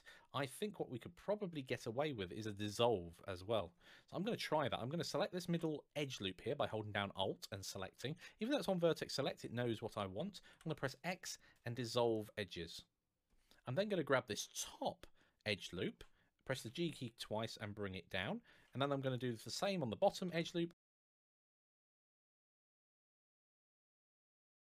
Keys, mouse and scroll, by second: 4.8 alt+click, 10.3 x, 14.3 alt+click, 16.3 g, 17.9 click, 18.8 alt+click, 20.0 click, 20.1 alt+g.